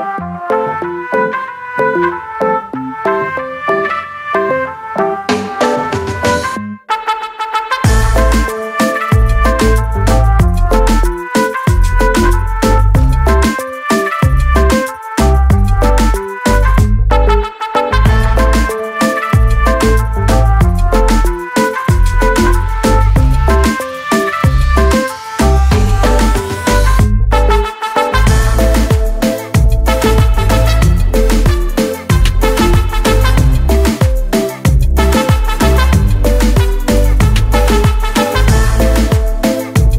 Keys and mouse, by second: 0.7 click, 0.9 double click, 2.2 double click, 2.3 double click, 3.3 click, 5.4 click, 8.7 click, 10.2 click, 16.2 click, 19.0 click, 25.4 click, 26.4 click, 28.4 click, 29.4 click, 33.1 click, 36.7 click, 37.5 double click, 38.3 double click, 39.5 click, 39.6 click.